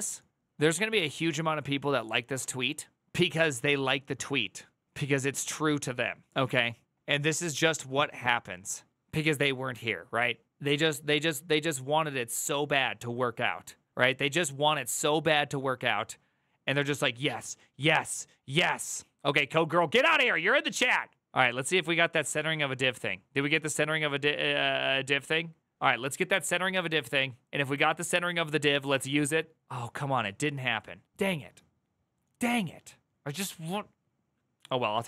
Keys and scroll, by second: 0.5 typing.